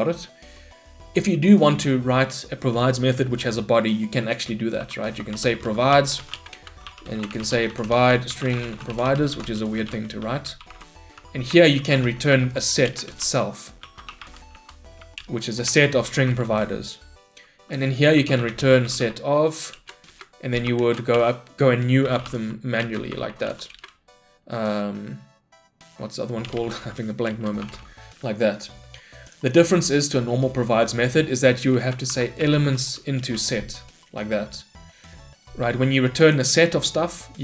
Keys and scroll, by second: 6.4 Return, 12.9 Return, 19.8 Return, 27.3 Return, 33.3 Return.